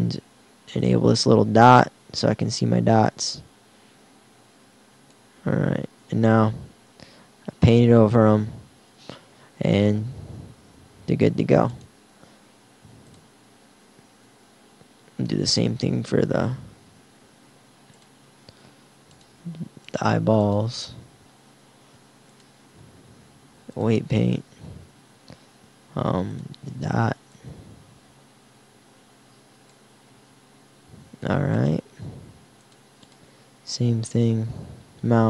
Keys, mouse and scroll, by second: 0.9-2.6 drag, 3.1-4.6 drag, 5.4 r, 13.6 typing, 23.9 click, 26.4-29.1 drag, 30.1 r.